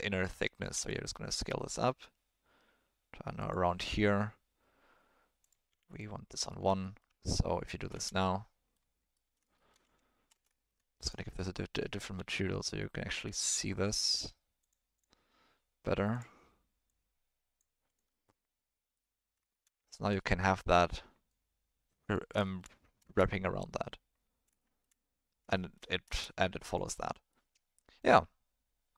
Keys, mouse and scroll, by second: 0.7 s, 5.4 click, 6.6 ctrl+click, 6.9 middle click, 7.0 Tab, 7.3 middle click, 7.9 space, 8.2-8.7 middle drag, 9.1 middle drag, 9.5 shift+middle drag, 10.3 space, 10.5 shift+middle click, 12.1 z, 14.0 click, 14.9 click, 16.1 click, 18.1-19.3 middle drag, 19.5 shift+middle click, 19.8 ctrl+middle drag, 20.2 middle click, 21.3-22.1 drag, 22.4 shift+middle drag, 23.0 space, 24.6 shift+middle drag, 25.5 shift+middle drag, 26.6 click, 26.6 space, 26.9-27.3 middle drag, 28.0-28.9 drag.